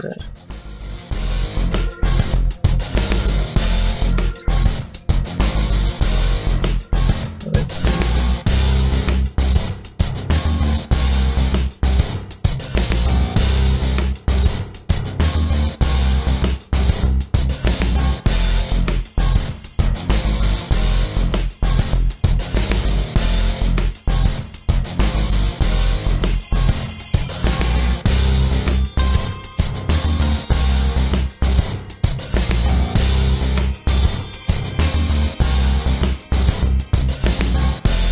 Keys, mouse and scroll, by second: 1.4 click, 3.9 a, 4.2 middle click, 5.0 shift+middle click, 5.3 middle click, 6.1 middle click, 6.7 ctrl+r, 8.9 click, 10.1 middle click, 10.7 ctrl+r, 13.7 click, 14.0 middle click, 14.6 middle click, 15.0 scroll up 1, 15.1 middle click, 16.3 ctrl+r, 19.0 click, 19.5 ctrl+r, 22.5 click, 22.7 a, 23.0 middle click, 24.4 shift+middle click, 25.2 shift+middle click, 26.0 ctrl+r, 28.2 click, 28.4 ctrl+r, 30.8 click, 31.8 click, 33.0 ctrl+r, 34.7 click, 34.9 ctrl+r, 36.4 click, 36.9 ctrl+r.